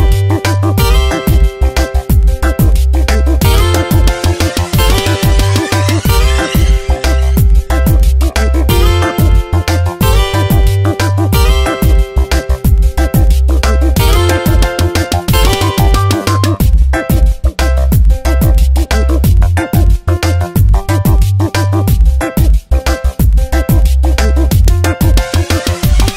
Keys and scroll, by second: 3.5 Tab, 12.0 Return, 12.5 space, 13.3 Tab, 14.6 v, 16.6 s, 20.4 Tab, 21.6 space, 23.4 space, 24.6 ctrl+z.